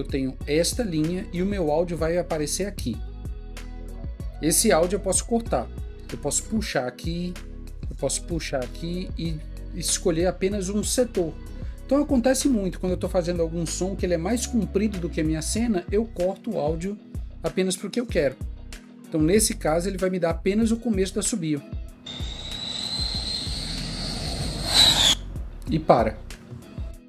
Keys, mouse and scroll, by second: 0.3 click.